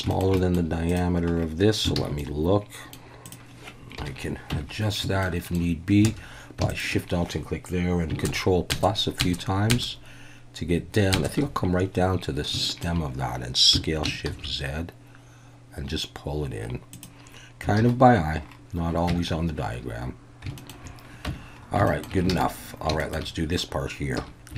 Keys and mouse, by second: 0.1 shift+click, 0.4 middle click, 0.9 click, 2.0 alt+a, 2.2-2.9 middle drag, 4.0 KP_1, 4.5 Tab, 5.2 shift+middle click, 6.1 alt+a, 6.7 alt+shift+click, 8.3 ctrl+KP_Add, 8.7 ctrl+KP_Add, 9.3 ctrl+KP_Add, 9.7 ctrl+KP_Add, 11.1 ctrl+KP_Add, 12.6 shift+click, 13.7 s, 14.3 shift+z, 16.9 click, 17.8 alt+a, 19.1 Tab, 20.6 shift+click, 21.9 shift+middle click, 22.3 alt+a, 23.0 shift+middle click, 24.2 2.